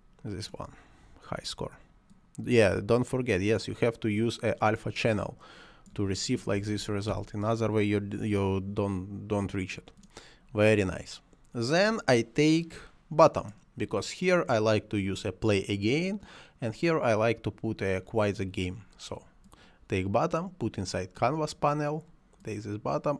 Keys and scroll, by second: 6.6 4, 6.8 8, 7.1 Return.